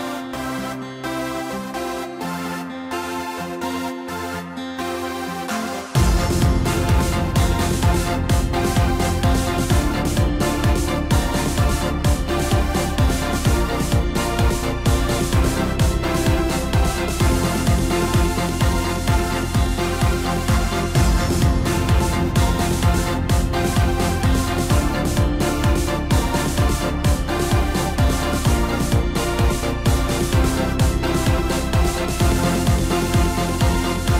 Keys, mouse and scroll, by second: 0.7 g, 2.6 scroll down 3, 2.9-3.7 middle drag, 3.7 scroll up 2, 5.2-8.3 drag, 8.3-11.0 middle drag, 11.0 scroll down 2, 15.2 KP_7, 17.2 click, 18.4-21.6 drag, 22.4-24.1 drag, 30.7-32.3 middle drag, 32.3-33.4 drag.